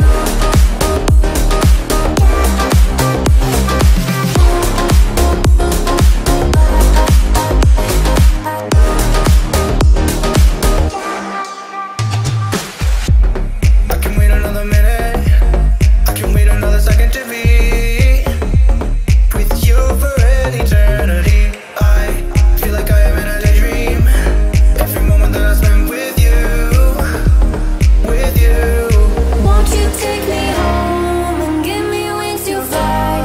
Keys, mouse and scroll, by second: 1.7-2.3 scroll down 1, 2.8-5.6 middle drag, 5.6-5.9 scroll up 1, 6.8 m, 7.3 click, 8.6 space, 8.8 scroll down 1, 10.3-11.9 middle drag, 11.9-12.3 scroll up 1, 12.7 middle click, 14.3-15.5 scroll up 1, 15.5 m, 16.1 click, 17.2 click, 17.3 space, 17.5 scroll down 1, 18.4 shift+middle click, 19.9 s, 20.5 scroll up 1, 21.0 middle click, 21.8 k, 22.7 click, 23.7-24.5 typing, 24.3 Return, 25.1 scroll up 1, 25.1 scroll down 1, 25.5 shift+middle click, 26.1 scroll up 1, 27.3 m, 28.0 click, 29.1 Right, 30.3 click, 30.4 space, 30.6-32.1 scroll down 1, 32.1 click, 32.4 space, 32.9 k.